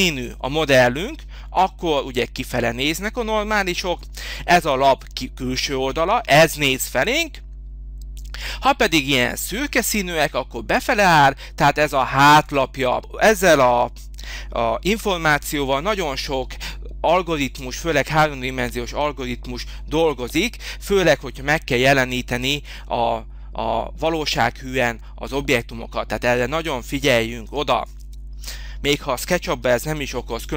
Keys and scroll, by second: 17.3 space, 28.5 Delete, 29.6 h.